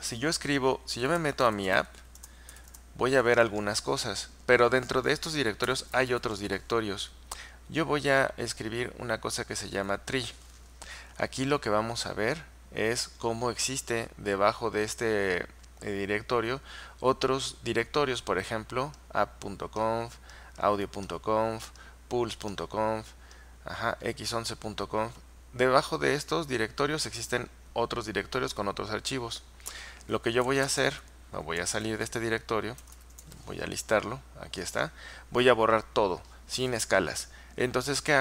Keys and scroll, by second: 0.8-3.1 typing, 2.3 Return, 5.5-6.7 typing, 9.9 Return, 30.3-31.6 typing, 32.8-33.8 typing, 38.1-38.2 typing.